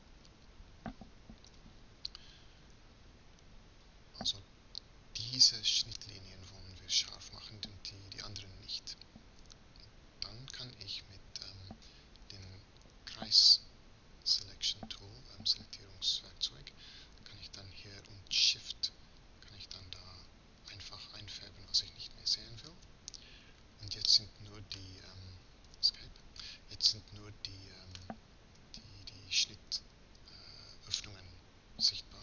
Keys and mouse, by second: 1.3 KP_Decimal, 12.2 c, 26.6-31.0 drag, 31.0-32.2 middle drag.